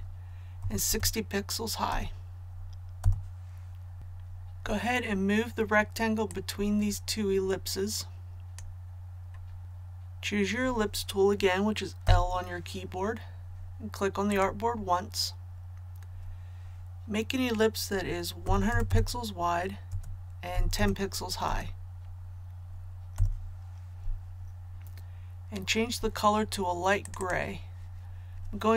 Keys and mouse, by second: 0.6 KP_6, 0.8 KP_0, 1.9 Tab, 4.0 v, 6.3-9.4 drag, 12.0 [, 14.2 click, 18.4 KP_1, 18.6 KP_0, 19.9 Tab, 20.5 KP_1, 20.7 KP_0, 21.4 Tab, 27.0 click.